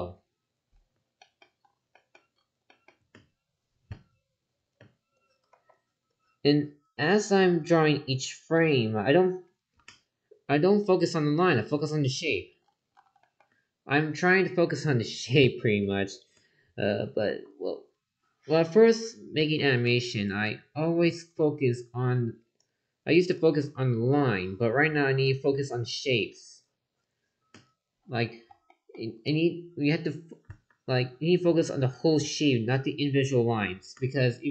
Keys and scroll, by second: 5.5 ctrl+z, 17.2 ctrl+z, 19.4 ctrl+z, 25.5 ctrl+z.